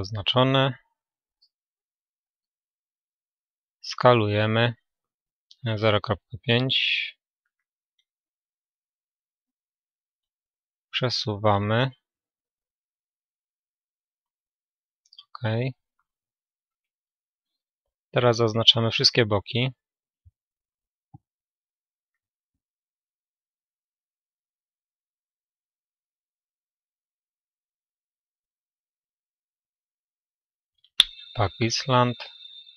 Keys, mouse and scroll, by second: 0.9 a, 1.3 a, 3.4 s, 11.0 g, 16.7 click, 16.7-19.3 middle drag, 18.1-24.7 right drag, 19.8-28.2 middle drag, 28.2 a.